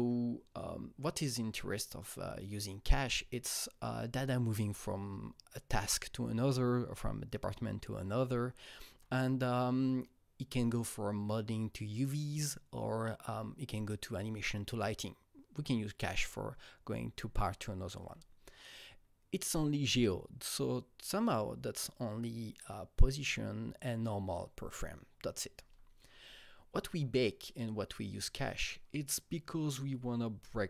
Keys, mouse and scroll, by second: 8.9 Right, 13.3 Right, 18.0 Right, 25.5 Right.